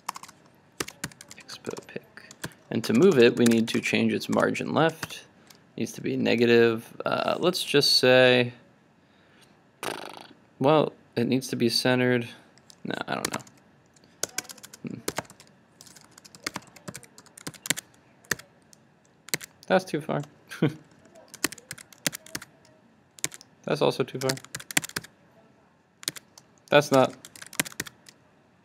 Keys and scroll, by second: 17.5 super+s, 17.9 super+Tab, 19.3 super+r, 19.5 super+Tab, 21.8 super+s, 22.2 super+Tab, 22.4 super+r, 23.4 super+Tab, 24.7 super+s, 25.0 super+r, 26.2 super+Tab, 27.4 super+s, 27.7 super+r.